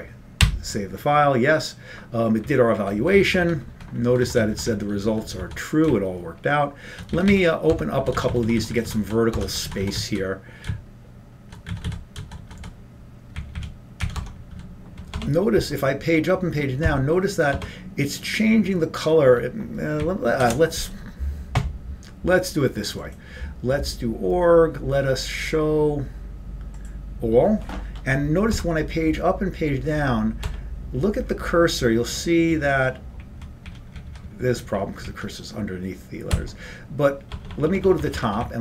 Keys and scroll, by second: 0.7 y, 2.6 Up, 3.1 Up, 8.5 Up, 8.5 Down, 8.5 Tab, 9.8 Down, 9.8 Tab, 10.5 Down, 11.7-17.3 Down, 17.3 Up, 17.3 Tab, 17.3 Page_Up, 17.3 Page_Down, 18.6 Page_Up, 20.1 Up, 20.1 Page_Up, 28.8 Page_Down, 33.4 Up, 34.4 Up, 35.8 Up.